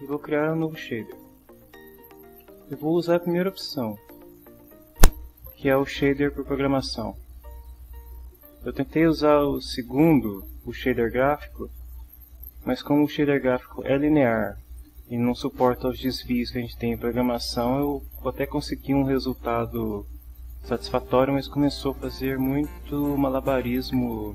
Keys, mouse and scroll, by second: 1.2 click.